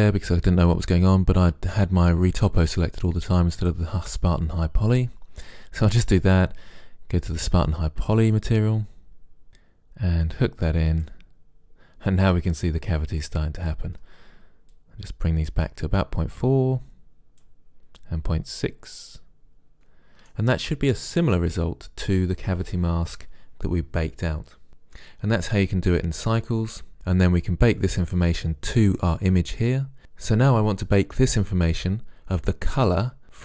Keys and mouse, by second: 3.7-5.5 drag, 6.3-12.1 drag, 20.7 click, 22.9-25.4 middle drag, 26.9-28.5 drag, 28.5-33.4 middle drag.